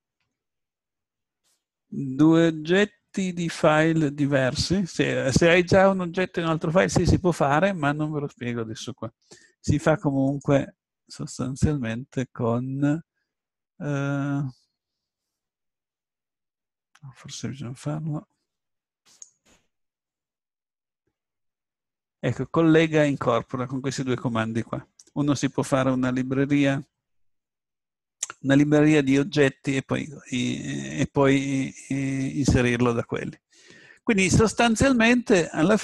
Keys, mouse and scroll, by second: 10.3-13.2 drag, 17.8 Tab, 19.1-21.1 drag, 32.8 click, 32.9-34.4 middle drag.